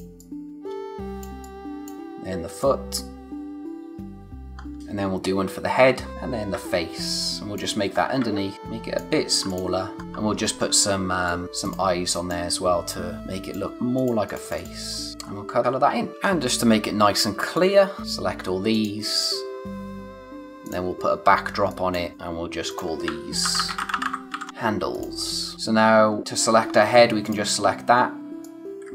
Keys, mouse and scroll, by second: 1.2 space, 1.4 click, 1.8 space, 2.1-2.6 scroll up 1, 2.6 click, 4.5 scroll down 1, 4.7 scroll, 4.8-5.1 scroll up 1, 6.0 click, 7.9 scroll up 1, 8.5 alt+shift+click, 9.9 scroll up 1, 10.0 shift+Left, 11.3 alt+shift+click, 15.2 scroll down 1, 16.1 space, 16.2-17.1 scroll up 1, 17.3 space, 17.5 click, 17.9 space, 18.0 click, 20.6 click, 21.3 scroll down 1, 21.5 space, 21.7 click, 23.2-24.8 typing, 24.9 click, 25.5-26.0 scroll up 1, 26.0 space, 26.5 scroll down 1, 26.7-27.2 scroll up 1, 27.2 click.